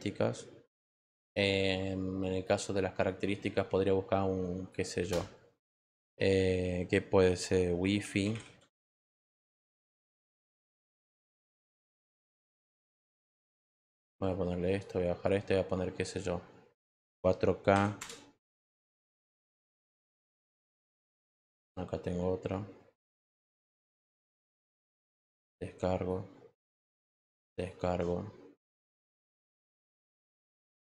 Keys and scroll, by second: 7.5-8.8 typing, 17.0 4, 17.7 k, 17.9 Return.